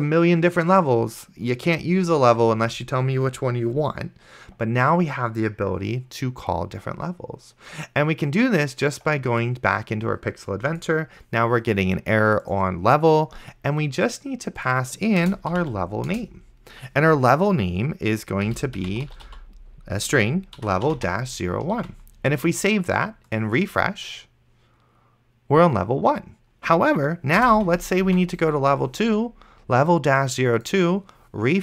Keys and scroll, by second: 2.9 ctrl+s, 15.3-16.2 typing, 18.2-21.5 typing, 22.1 ctrl+s, 27.6 2, 28.4 ctrl+s.